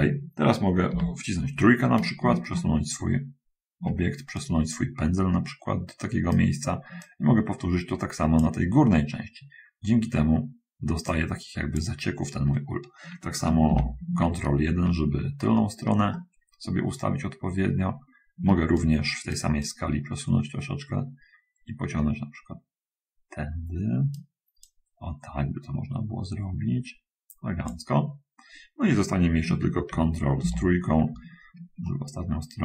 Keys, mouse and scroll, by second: 1.1 3, 2.8-4.2 shift+middle drag, 4.7-6.6 middle drag, 7.3-8.8 drag, 11.0-12.2 drag, 13.9 ctrl+1, 16.3-18.4 shift+middle drag, 19.0 shift+right click, 19.9-24.4 right drag, 24.6-28.0 drag, 30.5 ctrl+3, 32.0-32.6 shift+middle drag.